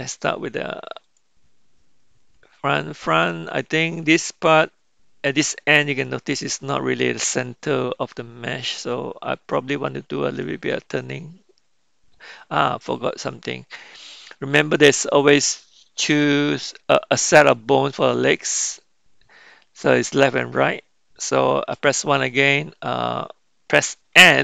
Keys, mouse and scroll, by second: 1.0 click, 10.4 r, 14.9-22.2 middle drag.